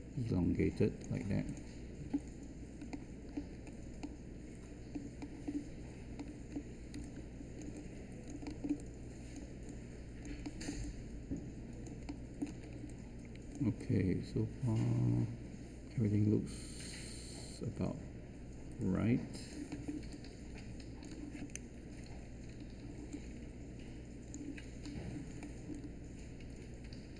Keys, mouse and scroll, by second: 6.9 space.